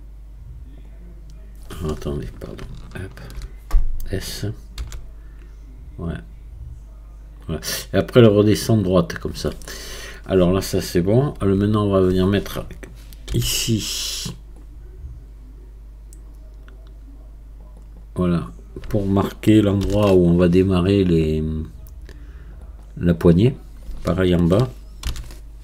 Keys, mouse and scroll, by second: 2.8-4.8 alt+shift+drag, 4.8 s, 13.3 ctrl+r, 19.8 ctrl+r, 25.0 ctrl+r.